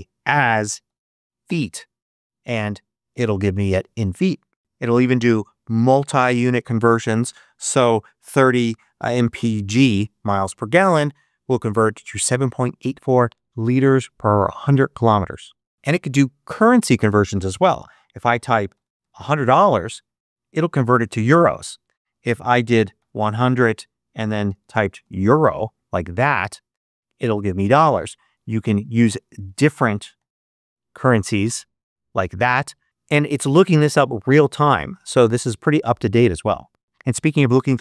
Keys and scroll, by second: 0.4-1.4 typing, 7.9-10.1 typing, 18.4-19.6 typing, 22.1 super+a, 22.7 super+1, 22.9 0, 24.3-25.6 typing, 28.6 BackSpace, 29.8-30.9 typing.